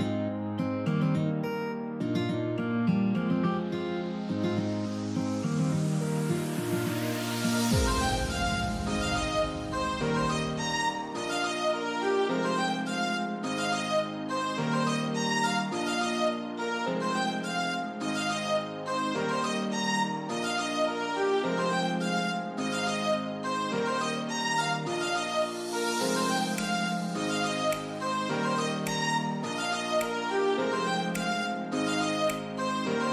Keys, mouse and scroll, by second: 0.4 typing, 0.5 click, 2.8 click, 8.5 click, 8.5 typing, 13.0 click, 13.0 typing, 20.7 click, 21.8 scroll down 1, 24.1-33.1 drag.